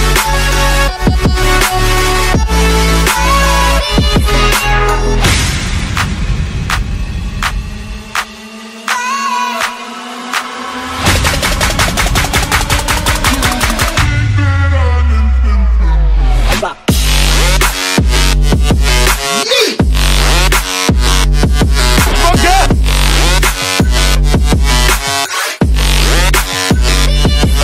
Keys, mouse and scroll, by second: 2.1 click, 3.9 click, 4.8 click, 5.6 click, 6.3 F9, 12.1 click, 12.8 click, 13.4 click, 14.3 Delete, 14.3 click, 14.5 click, 14.7 F9, 17.4 click, 17.6 click, 17.8 click, 18.0 End, 18.4 End, 19.7-21.2 typing, 21.8 click, 24.5 click, 24.9 click, 25.7 click, 26.6 click, 26.8 Return, 27.1 Return.